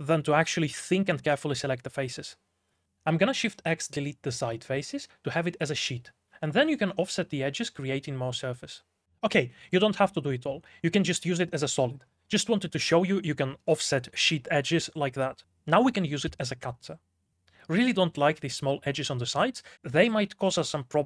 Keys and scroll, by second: 0.5-1.9 typing, 7.7 alt+j, 8.0 4, 8.3 x, 9.0 shift+w, 9.7 3, 11.0-14.3 typing, 16.3-18.7 typing, 20.1 x, 20.9 x.